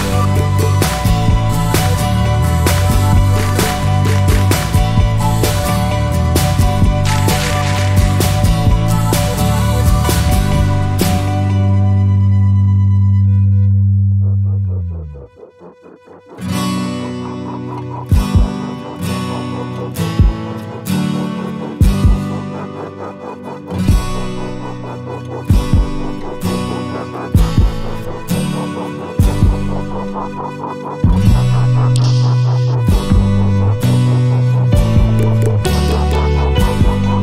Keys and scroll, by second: 10.7-12.1 typing, 29.8-31.1 typing.